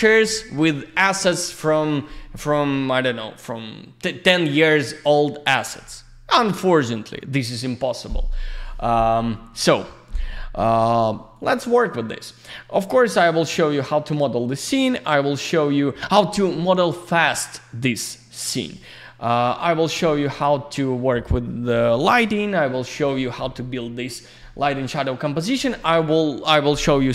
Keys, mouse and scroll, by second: 11.3 click, 19.2 click, 19.4 F4.